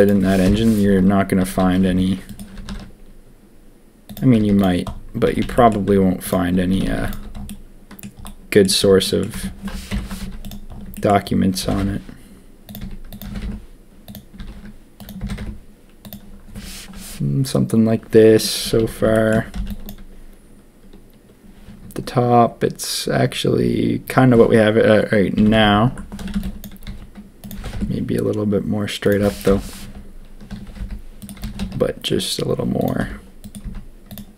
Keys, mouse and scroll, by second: 0.4 ctrl+KP_1, 1.5 s, 2.5 s, 4.3 z, 5.2 a, 5.4 a, 5.5 shift+click, 6.7 a, 6.8 a, 7.0 alt+click, 7.4 click, 8.2 click, 8.8 Tab, 9.0 click, 9.3 Tab, 9.9 ctrl+KP_3, 10.2 z, 11.6 g, 12.8 s, 13.2 g, 14.3 s, 15.2 g, 18.6 a, 18.7 a, 19.1 shift+middle click, 19.5 b, 25.3-27.5 typing, 26.5 click, 26.7 click, 29.4 ctrl+KP_1, 30.4 s, 31.4 s, 33.0 r, 33.6 z.